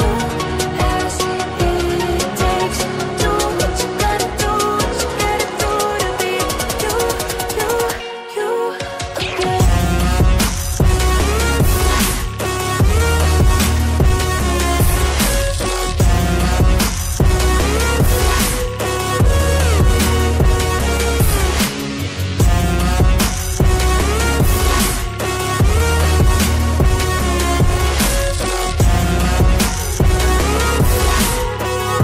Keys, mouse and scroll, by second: 1.6 click, 4.0 double click, 5.1 ctrl+z, 6.1 click, 17.6 double click, 19.2 double click, 20.2 click, 21.7-23.3 Up, 27.8 click, 29.5 scroll up 1, 29.9 click, 31.0 scroll down 1.